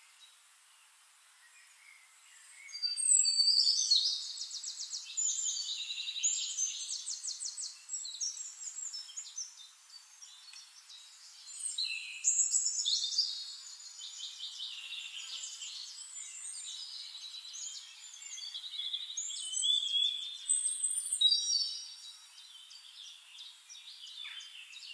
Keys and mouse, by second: 0.5-1.7 middle drag, 2.4 click, 5.1-9.0 drag, 9.7 click, 11.0-12.6 drag, 14.2-23.5 drag, 16.9-23.5 right drag, 23.7-24.9 drag, 24.1-24.9 right drag.